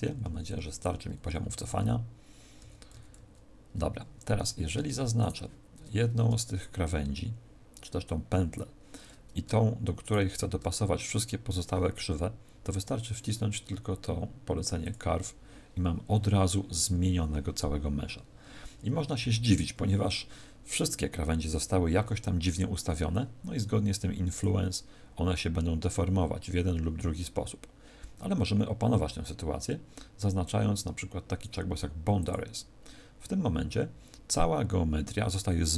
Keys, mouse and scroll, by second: 4.3 a, 5.1 alt+shift+right click, 9.9 alt+shift+right click, 14.7 click, 24.3 click, 32.2 click.